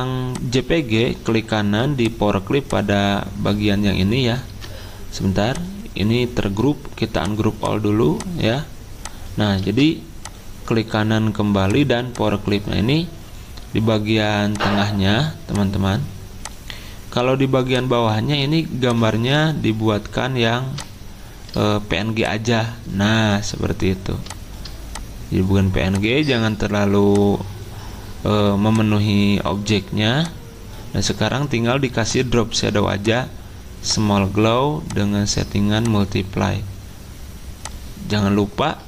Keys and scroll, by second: 4.5 ctrl+z, 9.6 ctrl+z.